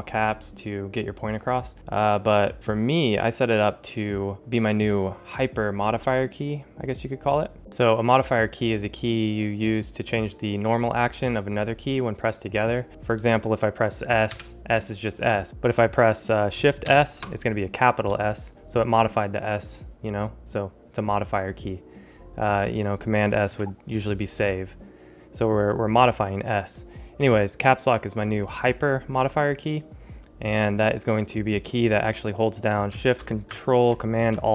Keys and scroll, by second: 14.2 s, 16.7 shift+s, 23.4 s.